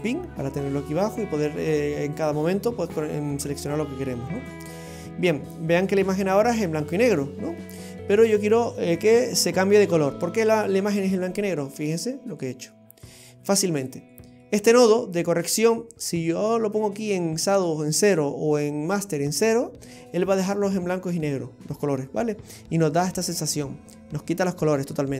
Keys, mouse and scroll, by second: 1.6 click, 2.2 click, 4.4 click, 5.2 scroll down 2, 5.7 middle click, 10.2-10.9 scroll down 7, 11.3 middle click, 12.4 click, 13.3-14.0 scroll up 5, 14.2 middle click, 16.4-16.8 scroll up 4, 21.1-23.5 scroll down 6.